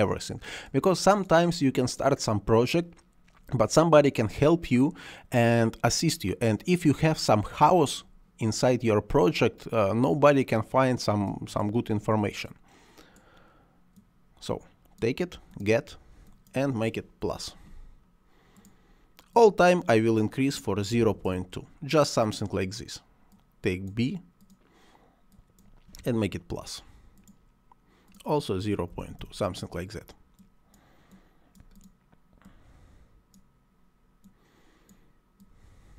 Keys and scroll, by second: 17.1 +, 20.8 ., 20.9 2, 21.1 Return, 25.8 +, 28.7 ., 28.8 2, 29.0 Return.